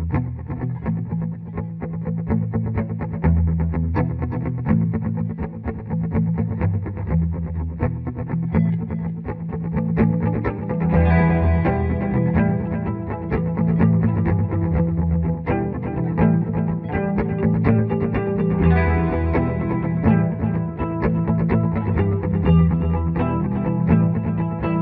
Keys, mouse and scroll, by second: 0.0-5.5 drag, 7.5 click, 10.3 F12, 11.0 click, 11.4 Home, 11.8 Delete, 14.8 shift+q, 15.1 click, 15.1 click, 15.9-17.1 ctrl+right drag, 17.1 ctrl+r, 18.0 ctrl+r, 18.9 F3, 19.8 ctrl+r, 21.7-24.5 drag, 24.5 shift+F2.